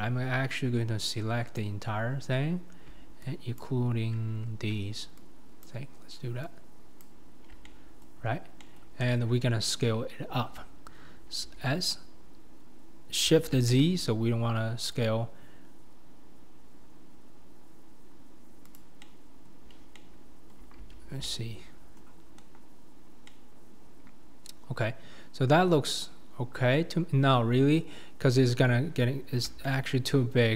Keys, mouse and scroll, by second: 1.6 click, 4.3-5.2 scroll up 4, 5.6 shift+click, 7.0 shift+click, 7.7 middle click, 8.2-8.6 scroll down 4, 8.6 middle click, 9.0 KP_7, 9.7-11.5 scroll up 3, 11.5 s, 19.0 middle click, 19.9 middle click, 23.3-26.6 middle drag.